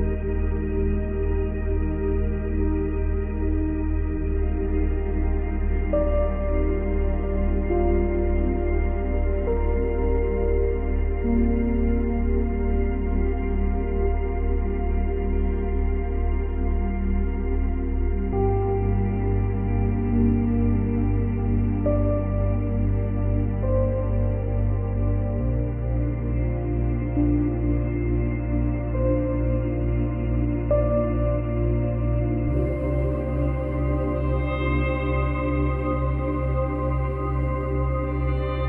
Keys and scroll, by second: 20.5 space, 21.8 space, 27.8 ctrl+c, 27.9 ctrl+v, 38.0 space.